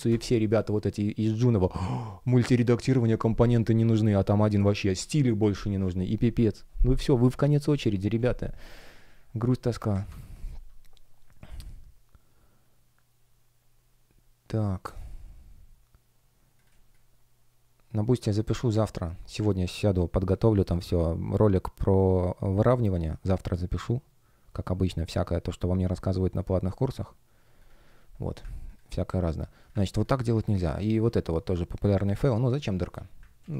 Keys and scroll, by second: 9.8 Escape, 16.6 space, 18.6 F1, 31.1 shift+p, 33.3 super+z.